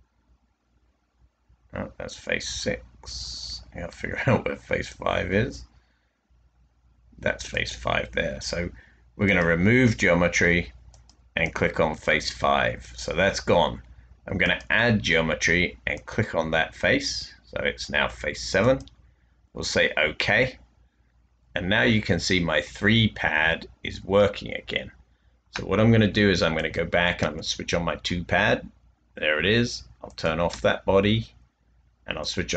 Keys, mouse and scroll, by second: 27.4 space, 30.4 space.